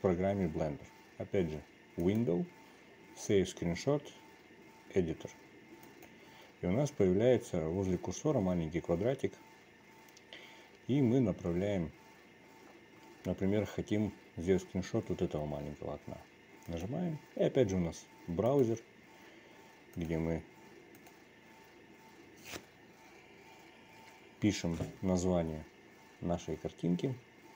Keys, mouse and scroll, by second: 2.9-17.7 drag.